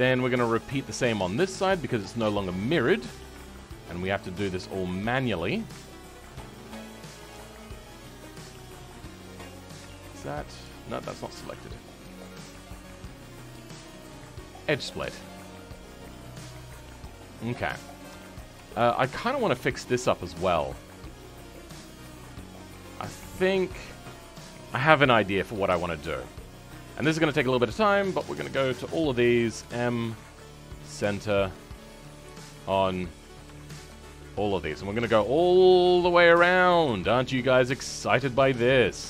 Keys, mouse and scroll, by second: 0.3-0.7 scroll up 7, 0.7 shift+middle click, 1.3 Tab, 1.6-2.5 scroll up 3, 2.5 alt+click, 2.9-3.4 scroll down 2, 3.4 shift+middle click, 3.9-4.4 scroll up 2, 4.4 scroll down 3, 4.6-6.3 shift+middle drag, 6.3-6.6 scroll up 4, 6.6-7.9 middle drag, 7.9 alt+shift+click, 8.2-8.6 scroll down 2, 8.6 middle click, 9.5-9.9 scroll up 2, 9.9-11.3 shift+middle drag, 11.3 alt+shift+click, 11.6-12.1 scroll down 3, 12.1-14.6 middle drag, 14.6 right click, 15.3-18.2 middle drag, 18.2-18.5 scroll up 2, 18.5 Tab, 18.8-22.7 shift+middle drag, 22.7-23.3 scroll up 1, 23.3-25.8 shift+middle drag, 25.8-28.2 drag, 30.7 m, 35.0-36.0 shift+middle drag, 36.0 shift+click, 37.7 m.